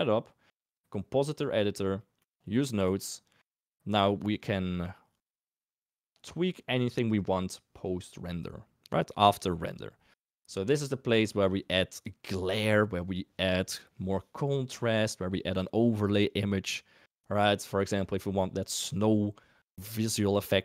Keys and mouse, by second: 2.1 middle click, 2.7 click, 4.0 click, 5.3 click, 6.3 middle click, 11.5 middle click.